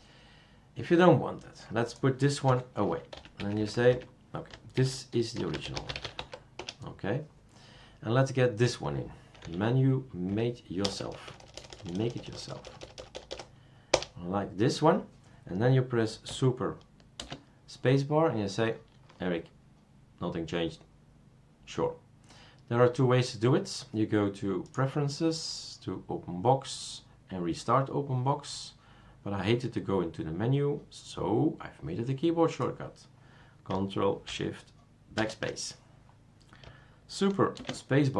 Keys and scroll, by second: 2.5 F2, 3.1 Right, 3.4 Right, 3.6 Right, 3.7 Right, 3.9 Right, 4.7-6.7 typing, 9.4 F2, 10.3 Right, 10.8-13.3 typing, 13.9 Return, 17.2 super+space, 35.2 ctrl+shift+BackSpace, 37.6 super+space.